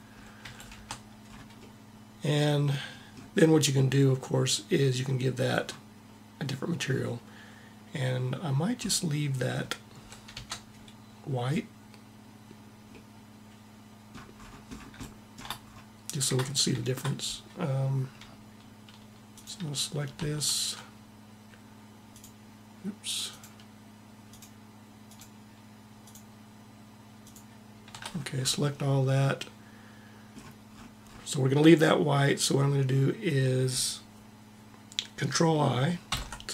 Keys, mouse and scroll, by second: 0.0 a, 0.4 Tab, 10.0 Tab, 27.6-29.1 middle drag, 35.7 ctrl+i.